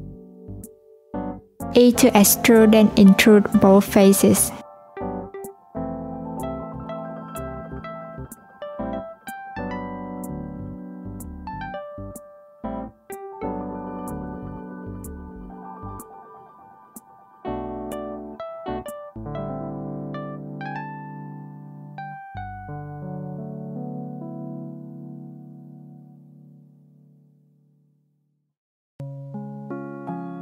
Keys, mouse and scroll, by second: 0.5-1.7 scroll up 1, 1.7 Tab, 2.6 e, 8.4 shift+click, 11.8 Tab, 12.7 ctrl+2, 14.1 right click, 16.4 Tab, 17.2 ctrl+r, 17.9 Tab, 19.0 ctrl+z, 19.4 ctrl+z, 20.5 click, 21.4 alt+z, 21.8 click, 23.0 click, 24.2 Tab, 25.9 click, 26.5 alt+z, 27.0 click, 27.7 click, 28.6 click, 29.8 click.